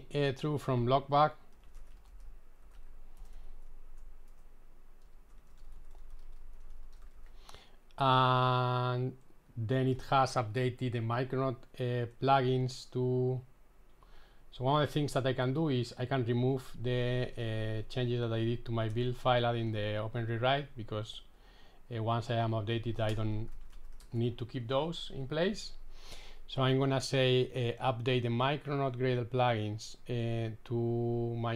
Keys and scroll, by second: 18.3 super+x, 20.3 super+s.